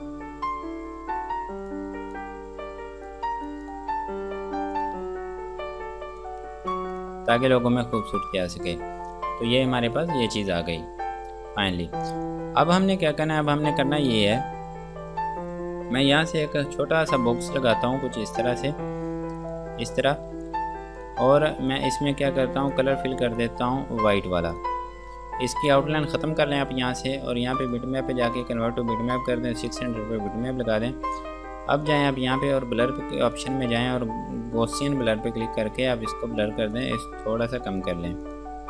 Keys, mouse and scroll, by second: 8.7 space, 10.1 click, 11.1 scroll down 1, 17.6 click, 21.7 F2, 21.9 click, 26.3 right click, 27.9 click, 30.6 scroll up 1, 32.1 click, 35.7-37.0 scroll down 1, 37.0 click.